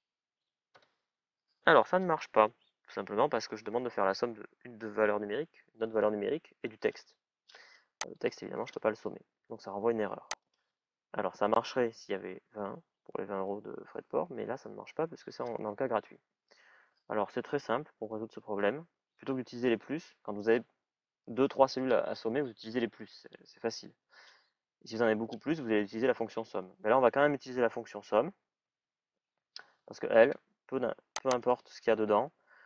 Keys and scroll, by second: 0.5 Return, 17.2 BackSpace, 28.4 shift+s.